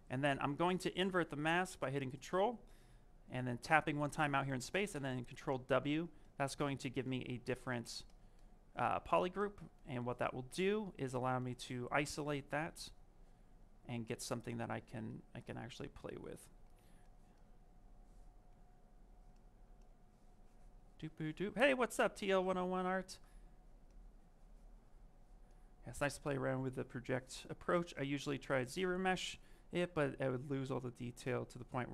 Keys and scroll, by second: 15.6 s.